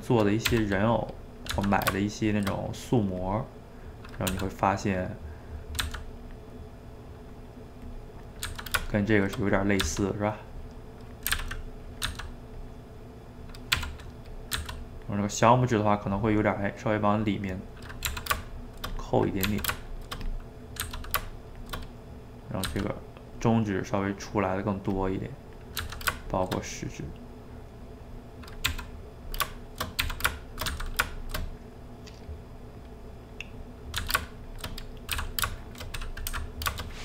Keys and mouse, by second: 0.5 r, 1.2 middle click, 1.5 g, 2.6 middle click, 3.3 click, 3.4 middle click, 4.3 r, 5.0 middle click, 5.8 g, 6.5-7.9 middle drag, 7.9 click, 8.0 middle click, 8.5 g, 9.6 click, 9.8 g, 10.9 middle click, 11.3 s, 12.1 g, 12.9 middle click, 13.8 r, 14.6 g, 15.2-18.1 middle drag, 18.1 r, 19.0 click, 19.5 r, 20.3 click, 20.4 middle click, 20.8 g, 21.8 middle click, 22.7 g, 23.6-25.0 middle drag, 25.0 click, 25.1 middle click, 25.8 g, 26.5-28.7 shift+middle drag, 28.7 r, 29.6 shift+middle click, 30.1 r, 30.7 g, 31.4-34.0 middle drag, 34.0 g, 34.7 middle click, 35.1 d, 35.6 shift+middle click, 36.3 s.